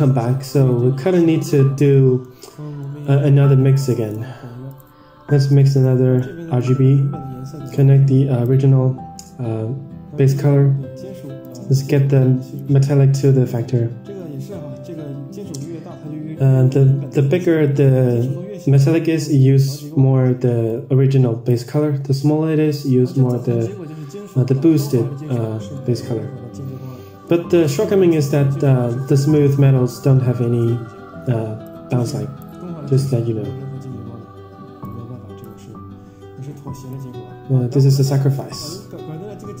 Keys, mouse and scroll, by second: 0.6 Tab, 1.8 middle drag, 2.4 scroll down 4, 2.7 middle click, 3.7 click, 4.0 shift+d, 5.6-6.0 drag, 6.0-6.5 middle drag, 7.7-8.7 drag, 11.3-13.6 drag, 19.3 click, 20.6 click, 22.3-22.8 scroll down 2, 22.8-23.3 scroll up 2, 25.2 Tab, 25.6 middle click, 27.2-28.3 drag, 28.9-29.3 scroll up 2, 29.3 scroll down 1, 29.5-29.9 scroll down 2, 29.9 scroll up 1, 30.3-30.7 scroll down 1, 31.6 click, 34.7-35.5 drag, 36.8-37.5 drag, 38.1 middle click, 38.4-39.6 scroll down 24.